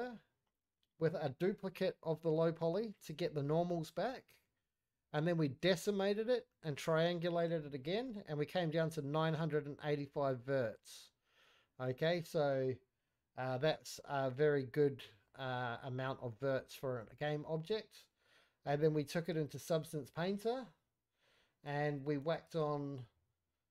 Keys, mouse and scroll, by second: 1.3 click, 6.6-8.4 scroll down 1, 8.4 middle click, 12.0 click, 12.0-16.2 scroll up 1, 18.5 middle click, 18.5-23.7 scroll down 2.